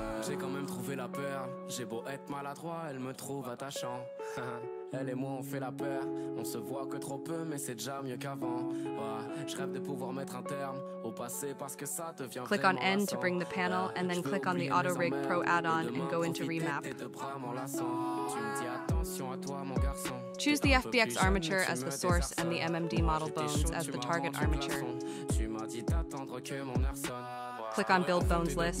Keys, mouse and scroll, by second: 6.2-6.7 scroll up 4, 7.3 click, 8.5-9.8 drag, 12.0-13.5 drag, 13.5-15.1 scroll down 14, 15.1 click, 16.8-23.8 drag, 25.9-28.8 drag.